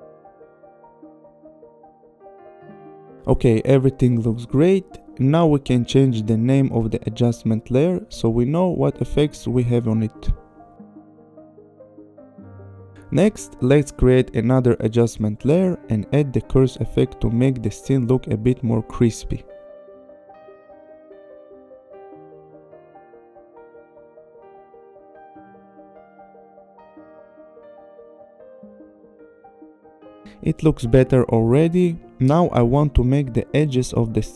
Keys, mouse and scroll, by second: 6.2 click, 6.9 click, 7.0 Return, 7.7 ctrl+c, 8.0 click, 8.0 Return, 8.5 ctrl+v, 9.3 /, 9.9 click, 10.1 Return, 10.6 ctrl+c, 11.0 click, 11.0 Return, 11.2 Right, 11.7 ctrl+v, 11.9 Return, 12.6 click, 13.8 click, 14.0 right click, 15.8 click, 16.8 click, 17.6-18.4 typing, 19.4 click, 21.6 click, 22.5 click, 23.4 click, 24.3 click, 26.7 click, 28.3 click, 29.2 click, 30.0 click, 33.0 click.